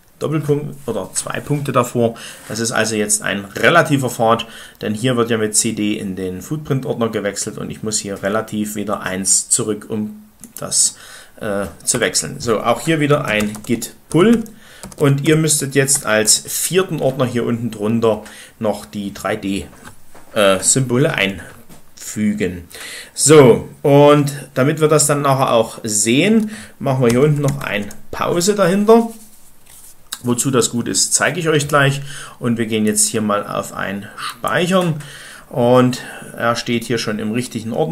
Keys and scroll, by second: 11.7 Return, 12.8-15.8 typing, 16.1 Return, 26.7-28.1 typing.